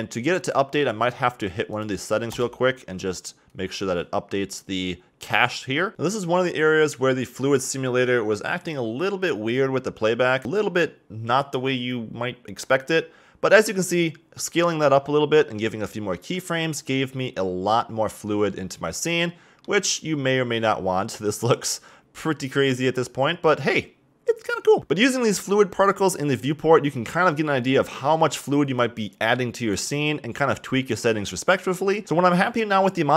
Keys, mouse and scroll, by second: 0.2 click, 1.7-5.9 drag, 18.1-21.4 middle drag, 24.8-26.9 drag, 30.5-32.0 drag.